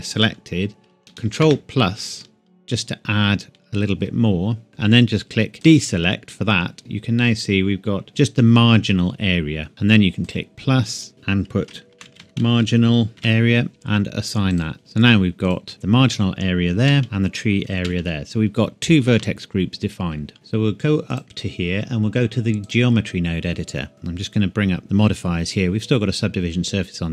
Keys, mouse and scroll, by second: 1.4 ctrl+KP_Add, 7.1 click, 10.2 click, 11.9-13.5 typing, 13.7 KP_Enter, 14.5 click, 14.8 typing, 15.4 click, 16.8 a, 17.0 click, 17.8 a, 18.0 a, 19.1 Tab, 20.3 shift+middle click, 21.1 click.